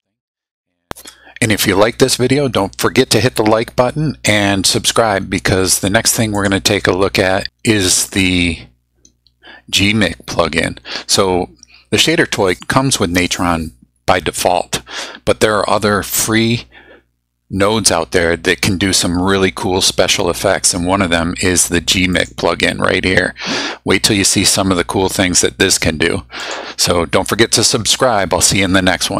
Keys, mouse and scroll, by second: 6.3 click, 8.1 click, 22.2 click, 26.4 click.